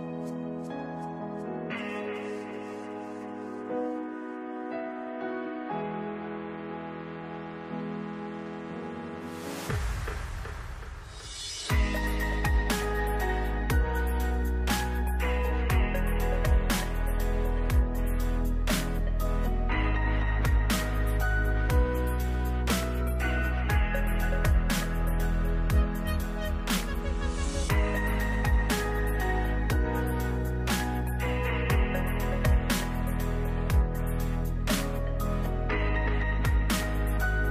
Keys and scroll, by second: 1.3 ctrl+s, 6.0 ctrl+s, 11.5 2, 11.9 0, 14.0 ctrl+s, 18.1 f, 19.3-21.7 typing, 22.6 ctrl+space, 24.1-25.3 typing.